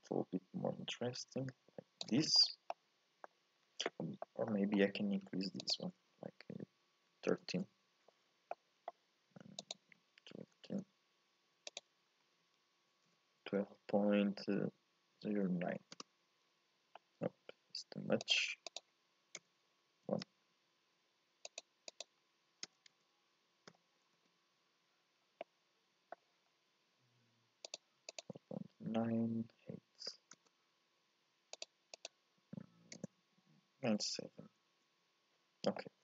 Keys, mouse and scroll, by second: 2.4-2.7 scroll down 3, 2.7 middle click, 3.6-4.2 scroll up 1, 4.2 middle click, 4.7-5.2 scroll up 1, 5.2-5.6 scroll down 1, 5.6-8.5 drag, 8.5-9.6 middle drag, 9.6-14.7 drag, 17.0-18.2 scroll up 3, 18.2-21.2 drag, 21.4-22.9 drag, 22.9 BackSpace, 25.1 scroll up 2, 25.4-26.5 middle drag, 26.5-27.7 scroll up 1, 27.7-30.7 drag, 31.5-34.6 drag, 35.7-36.0 middle drag.